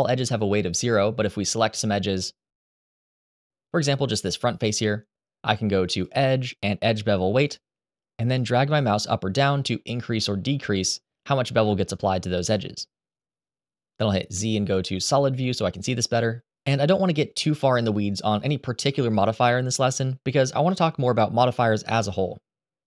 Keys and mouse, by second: 2.8 shift+middle click, 3.6 b, 5.8-7.9 drag, 11.6 middle click, 14.0 z.